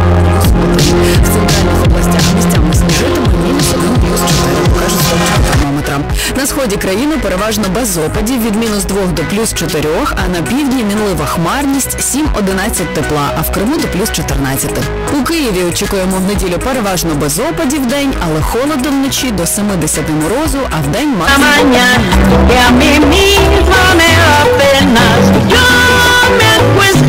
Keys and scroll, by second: 5.8 Page_Down.